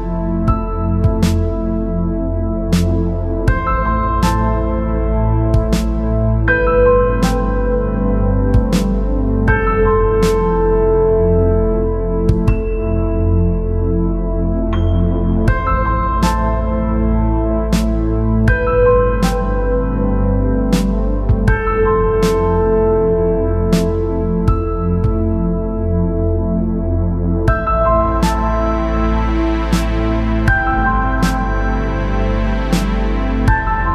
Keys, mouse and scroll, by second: 0.7 space, 0.9 click, 1.4 g, 2.2 click, 2.4 space, 4.6 space, 5.7 click, 6.2 shift+click, 7.4-8.7 drag, 9.6 click, 10.4 click, 10.4 KP_3, 10.6 KP_Enter, 11.9 click, 13.6 alt+a, 14.0 b, 15.2 b, 16.6-18.1 drag, 19.1 space, 19.5 alt+a, 20.1 click, 21.9-23.0 drag, 23.0 middle click, 24.6 shift+a, 26.4 shift+click, 27.6 g, 29.4 middle click, 29.7 click, 30.1 click, 30.5 middle click, 30.9 middle click, 32.6 click, 33.7 click.